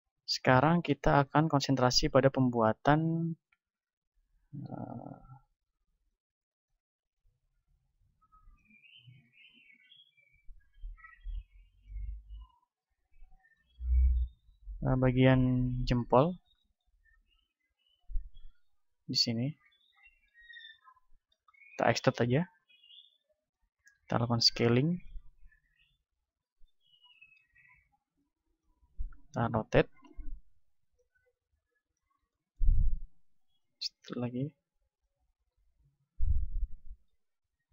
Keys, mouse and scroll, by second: 0.7 z, 1.4-4.7 middle drag, 4.7-8.5 right drag, 6.3 click, 8.5 click, 9.1-10.7 right drag, 9.7-11.4 drag, 12.3 s, 13.5-16.5 drag, 16.5-18.4 middle drag, 17.3 a, 17.8 ctrl+Tab, 18.7 z, 19.3-21.1 right drag, 20.1-21.3 drag, 21.3-23.4 middle drag, 22.8 e, 23.4-26.9 drag, 24.1 s, 26.3 KP_7, 26.9-28.1 middle drag, 28.1-33.5 drag, 29.3 r, 32.9 e, 34.5 click, 35.5 s, 36.4-37.7 drag, 37.4-37.7 middle drag.